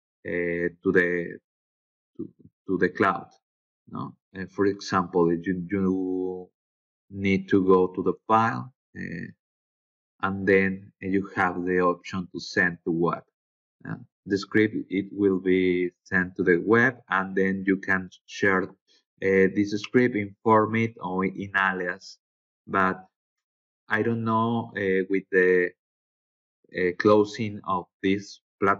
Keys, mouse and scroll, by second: 5.0 middle click, 6.2 click, 7.8-8.5 middle drag, 9.4 click, 14.1 click, 15.1 click, 19.4 click, 19.6 click, 27.4 click.